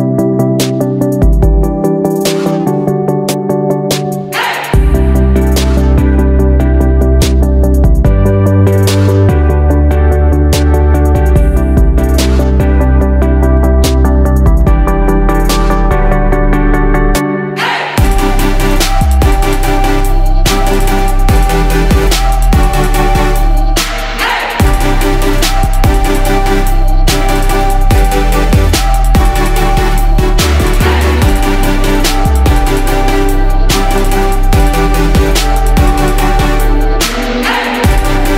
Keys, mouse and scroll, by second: 1.5 shift+click, 3.1 click, 5.5 right click, 7.3 click, 10.5-18.1 drag, 19.1 shift+click, 21.5-31.9 drag.